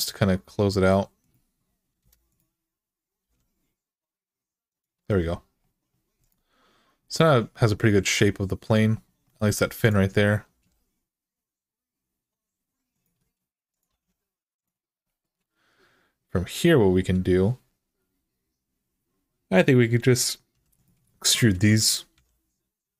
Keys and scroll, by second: 1.8 Return, 3.0 g, 10.3 g, 13.7 g, 20.3 2, 21.9 f.